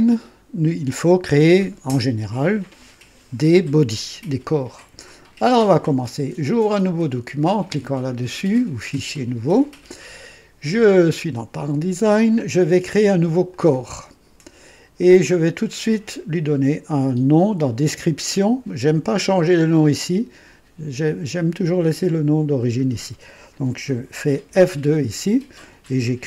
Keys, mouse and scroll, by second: 8.8 click, 13.4 click, 15.2 click, 18.3 click, 22.5 click, 24.4 F2.